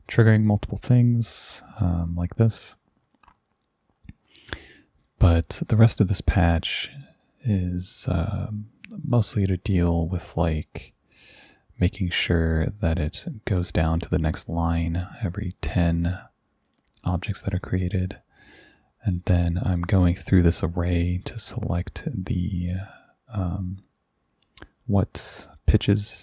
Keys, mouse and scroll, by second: 0.3 click, 3.2-4.6 drag, 10.4 click, 11.2 click, 16.7 click.